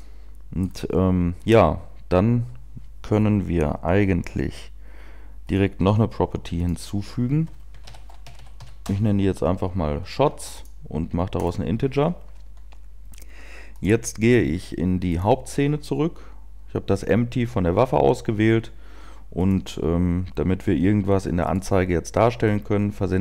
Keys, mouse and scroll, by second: 1.1 scroll down 1, 12.0 click, 15.4 click.